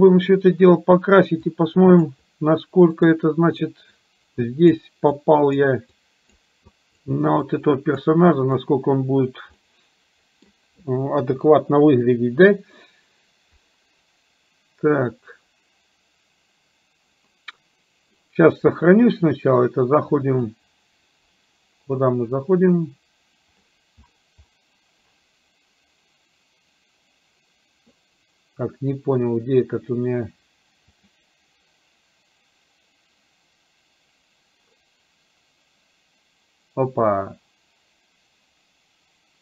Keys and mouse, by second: 1.5 click, 3.0 click, 4.0 click, 5.2 click, 6.0 click, 6.8 click, 7.5 click, 8.4 click, 9.7 middle click, 11.2 KP_1, 20.4-21.4 drag, 30.9-35.4 drag.